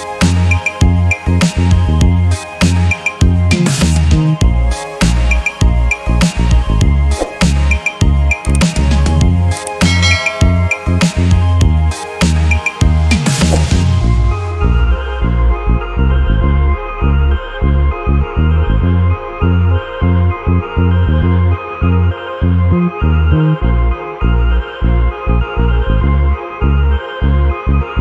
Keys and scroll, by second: 21.7 ctrl+d.